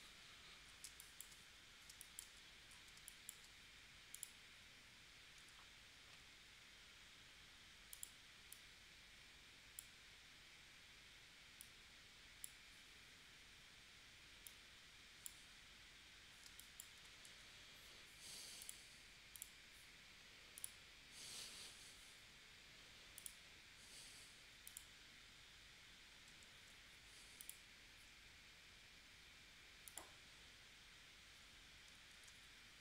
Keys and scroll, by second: 0.9 space, 1.9 space, 3.0 space, 5.4 a, 16.4 space, 17.3 v, 26.5 super+z, 32.1 shift+w.